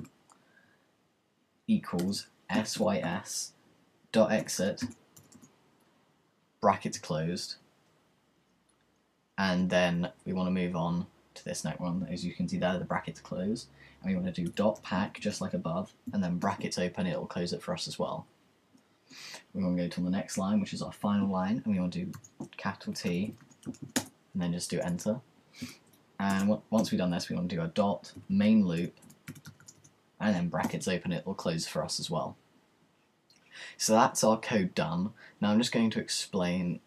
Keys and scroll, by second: 0.0-7.4 typing, 14.5-16.9 typing, 22.1-24.3 typing, 27.9-30.9 typing.